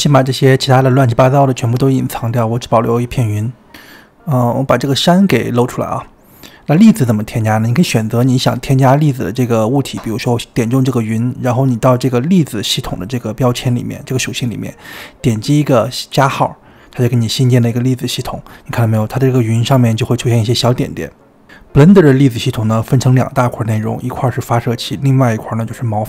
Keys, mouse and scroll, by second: 0.1-1.5 middle drag, 1.5 click, 2.5 click, 3.6-4.6 drag, 4.6 ctrl+z, 5.1 click, 6.4 click, 7.3-8.7 middle drag, 8.7 click, 9.3-10.4 middle drag, 10.4 click, 11.1-13.2 scroll up 4, 13.2-15.2 scroll down 2, 15.2 click, 17.2-20.1 drag, 20.1-21.1 scroll up 5, 21.4-21.9 scroll up 3, 21.9-22.4 shift+middle drag, 22.4-23.8 scroll down 2, 25.9 click.